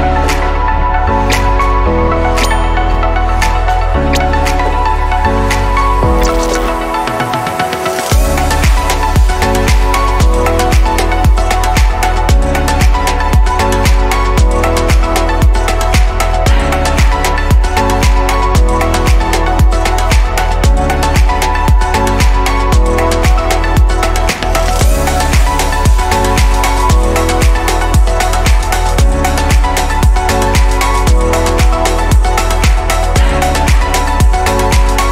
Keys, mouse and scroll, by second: 1.7 click, 3.7 ctrl+s, 5.3 shift+s, 7.0 shift+a, 8.3-9.7 middle drag, 9.7 click, 10.1-11.7 shift+middle drag, 11.7 r, 14.0-15.8 middle drag, 15.8 click, 16.7-18.5 scroll up 1, 18.5 shift+click, 19.5 /, 21.1 click, 21.7 click, 25.3 s.